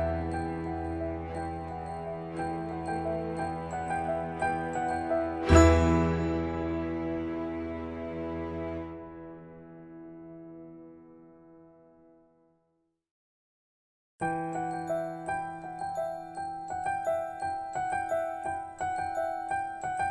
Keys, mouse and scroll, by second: 0.0-1.1 drag, 0.7 e, 1.1 shift+-, 10.3-11.1 scroll up 1, 12.4-20.1 drag.